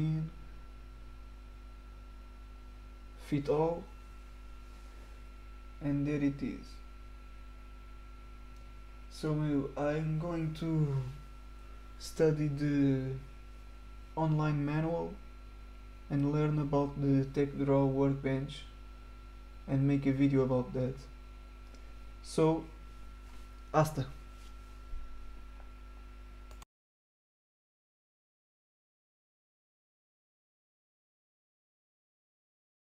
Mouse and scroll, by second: 0.6-1.7 middle drag, 0.8 right click, 2.6 right click, 3.4 click, 4.4-5.4 middle drag, 4.6 right click, 6.6 middle click, 11.3 click, 13.7-14.3 middle drag, 17.7 click, 32.3 click.